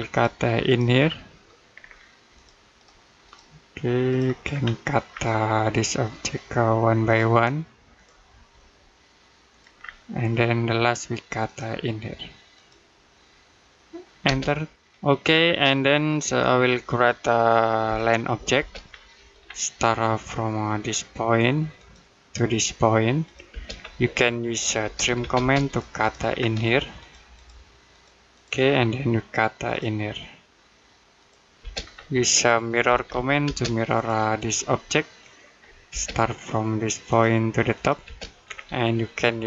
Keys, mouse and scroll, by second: 0.8 scroll down 1, 1.1 middle click, 1.5-2.2 scroll up 1, 2.2 click, 4.3-4.9 scroll up 1, 5.0 middle click, 6.9 click, 9.6-10.0 scroll down 1, 10.0 middle click, 11.3 click, 14.1 space, 15.1-15.7 scroll down 1, 15.7 middle click, 17.7 l, 18.4 space, 18.7 scroll down 1, 19.0 middle click, 19.3-20.9 scroll up 1, 21.6 click, 23.3 space, 23.6-24.7 scroll up 1, 24.7 t, 25.0 space, 25.5 click, 26.2-26.8 scroll up 1, 26.8 click, 28.5-29.5 scroll up 1, 29.5 click, 31.4 space, 31.6-32.0 scroll down 1, 32.0 middle click, 32.7-33.3 typing, 33.8 click, 34.7-35.0 scroll down 1, 35.0 middle click, 35.7 space, 36.9 click, 37.9 space, 38.3 scroll up 1, 38.9 middle click.